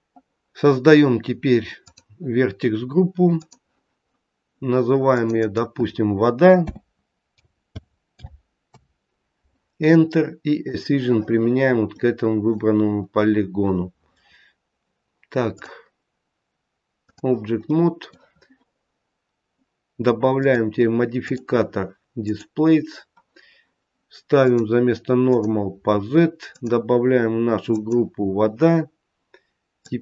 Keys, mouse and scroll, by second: 1.8 click, 3.2 click, 5.1 click, 5.3 click, 10.5 click, 11.8-12.8 scroll up 1, 12.8 middle click, 12.8-13.6 scroll up 3, 15.5 click, 17.6 middle click, 20.3 click, 21.1 click, 22.9-24.3 scroll down 1, 24.3 click, 24.3-25.3 scroll down 1, 26.4 click, 29.7 click.